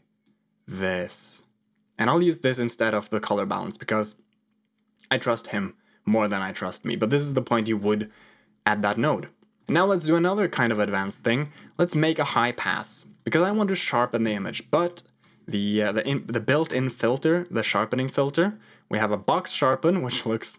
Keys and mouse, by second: 1.2 click, 9.5 click, 10.2 click, 11.6 click, 12.2 g, 13.1 click, 13.9 click, 14.1 shift+a, 18.1-19.2 drag.